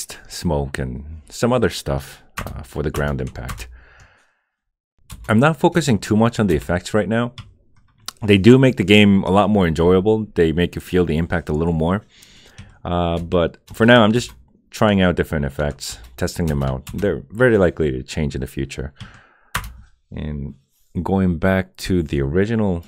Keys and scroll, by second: 2.4 Return, 2.9 Return, 3.5 Return, 5.1 Return, 5.7 Return, 6.5 Return, 13.1 Return, 13.6 Return, 15.9 Return, 16.4 Return, 19.5 Return.